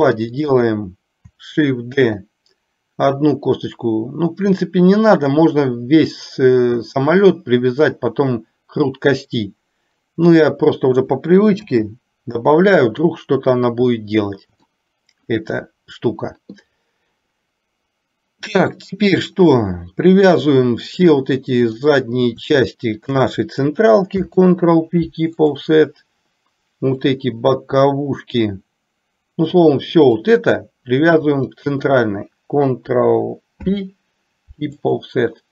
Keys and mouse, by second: 2.2 shift+d, 11.7 r, 14.8 shift+middle click, 21.3 click, 23.2 shift+click, 24.3 ctrl+p, 27.2 click, 29.8 click, 31.6 shift+click, 33.6 ctrl+p.